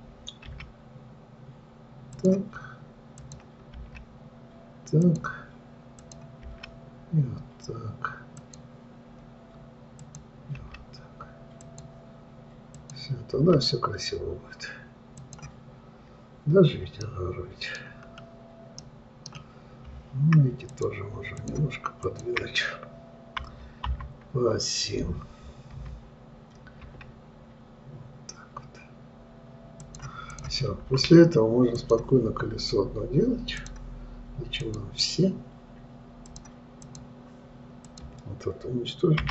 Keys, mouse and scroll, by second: 3.7 click, 4.2 g, 6.5 click, 6.9 g, 10.4 click, 11.1 g, 13.1 click, 13.8 g, 17.5 middle click, 18.4-19.2 scroll down 3, 19.2-21.1 middle drag, 21.1 click, 21.8 shift+click, 22.4 shift+click, 24.3 KP_3, 26.2 g, 30.7 click, 32.2 click, 34.0 click, 35.0 click, 36.7-38.4 drag.